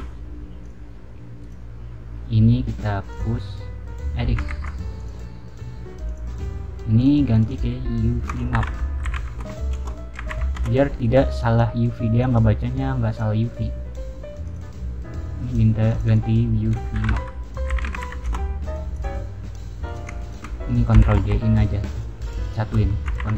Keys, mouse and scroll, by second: 0.5 click, 1.3 click, 3.0 click, 4.5 ctrl+z, 4.9 click, 6.0 click, 6.9 click, 7.3 click, 7.4 click, 8.2-10.1 typing, 10.5 Return, 11.3 click, 12.1 click, 13.0 click, 14.4 click, 15.8 click, 16.0 click, 16.7-18.3 typing, 18.9 click, 19.8 click, 20.1 shift+click, 21.9 click, 22.3 shift+click, 23.1 ctrl+j.